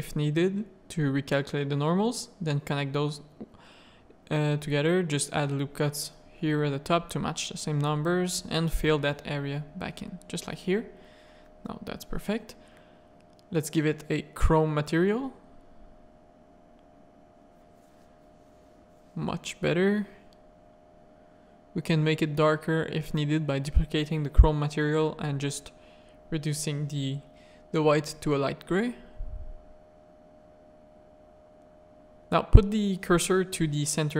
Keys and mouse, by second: 0.2 z, 0.5 click, 2.6-5.3 typing, 3.3 ctrl+r, 5.0 ctrl+r, 6.4-10.2 typing, 6.8 click, 7.7 click, 9.8 Tab, 10.5 middle click, 12.2 Tab, 12.2 a, 13.1 click, 13.9 Tab, 14.7 middle click, 15.0 alt+a, 15.2 z, 16.8-17.2 shift+middle drag, 19.3 click, 19.8 middle click, 20.3 click, 29.2 Tab, 30.0 shift+s, 31.2 z, 32.8 Tab, 33.2 alt+a.